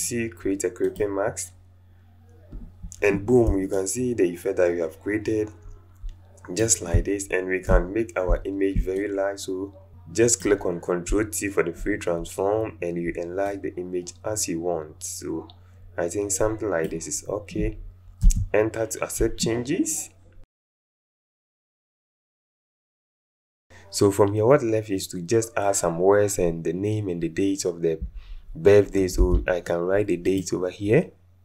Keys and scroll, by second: 18.2 Return, 29.2 t.